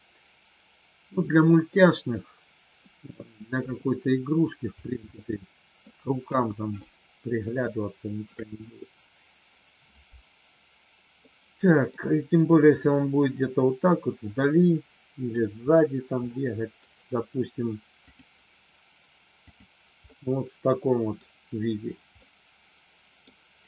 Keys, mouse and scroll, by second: 3.5 KP_3, 5.1 middle click, 6.4 KP_1, 7.6 shift+middle click, 11.2 middle click, 13.9-15.2 middle drag, 16.2 middle click, 20.2 middle click, 22.1-23.2 middle drag.